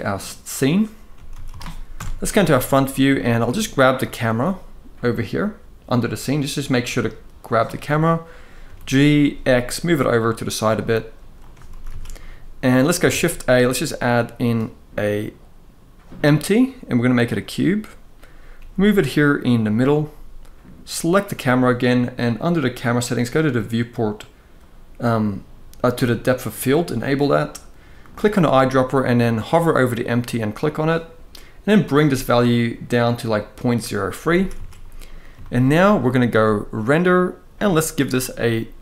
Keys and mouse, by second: 0.3 click, 1.1 ctrl+s, 1.2 ctrl+s, 1.6 KP_0, 2.8 shift+middle drag, 3.7 click, 5.6 click, 8.3 g, 8.9 x, 11.4 ctrl+s, 11.6 ctrl+s, 12.8 shift+a, 18.2 g, 20.6 click, 26.1 click, 31.5 click, 32.6 click, 32.8 click, 34.1 ctrl+s, 34.3 ctrl+s, 35.1-35.4 shift+middle drag, 36.6-38.8 drag.